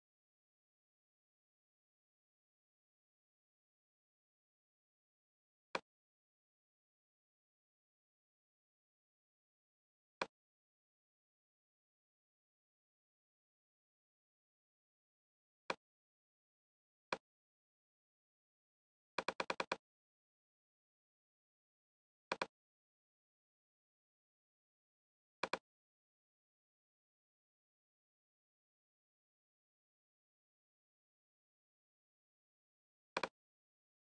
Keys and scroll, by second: 0.2 shift+o, 0.6 r, 1.2 m, 11.1 Up, 27.6 Down.